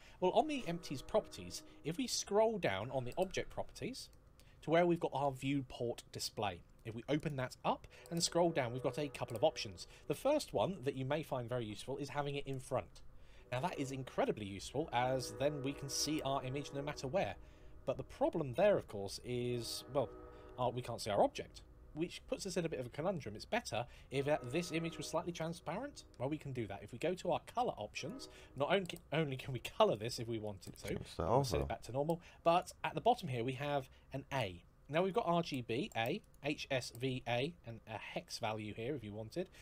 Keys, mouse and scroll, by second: 0.4 scroll down 1, 3.2 scroll down 1, 6.9 click, 7.7 scroll down 1, 12.3 click, 18.6 middle click, 23.5 middle click, 25.2 middle click, 27.8 click, 30.3 click, 32.3 click, 34.7 click, 37.2 click.